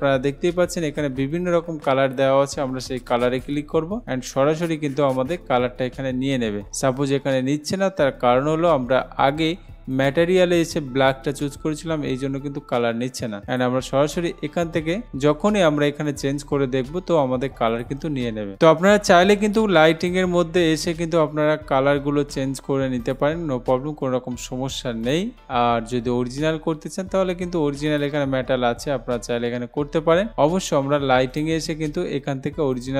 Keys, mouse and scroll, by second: 3.5 click, 10.2 click, 13.7 click, 16.3 click, 17.9 click, 20.3 click, 23.3 click, 25.3 click, 28.1 click, 31.5 click.